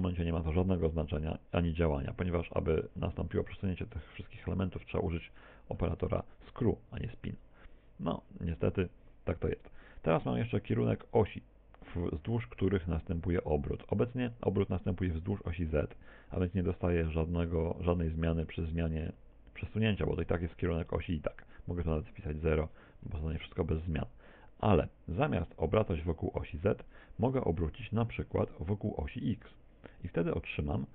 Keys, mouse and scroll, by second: 5.4 shift+middle click, 21.6 click, 26.8 click, 30.2 click.